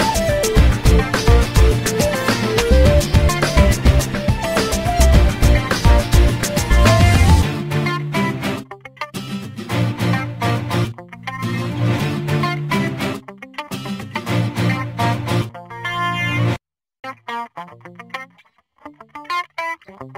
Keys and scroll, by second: 0.6 l, 4.5 Escape, 6.4 space, 11.4 f, 16.5 l.